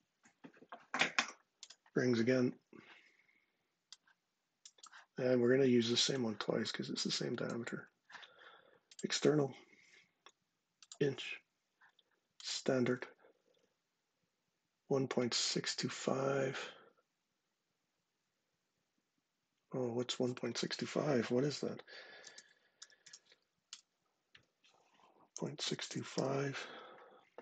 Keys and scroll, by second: 22.0 super+space, 22.3-23.2 typing, 23.4 Return, 24.8-26.4 typing.